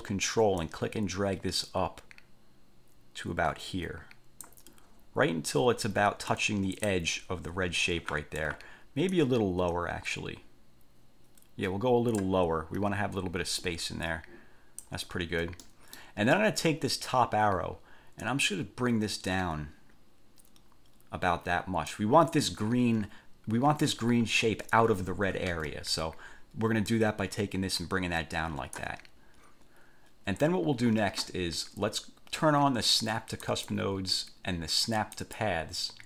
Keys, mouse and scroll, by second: 0.7-4.8 ctrl+drag, 5.0-5.9 ctrl+scroll up 2, 6.5 ctrl+click, 7.4 ctrl+scroll up 2, 8.1-8.9 ctrl+scroll down 4, 9.3-12.6 ctrl+drag, 12.6 ctrl+scroll up 2, 13.8 ctrl+click, 15.3-15.7 ctrl+scroll down 2, 15.9 ctrl+click, 18.4-22.3 drag, 25.7 ctrl+z, 27.1-29.1 drag, 33.6 click, 35.3 click.